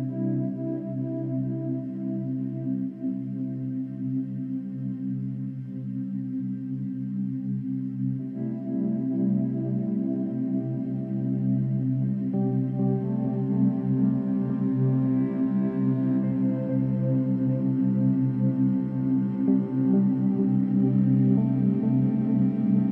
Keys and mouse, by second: 0.4 click, 5.6 click, 7.2 ctrl+s, 11.4 click, 15.7 ctrl+s, 17.1 click, 18.3-20.0 drag, 20.2 F12.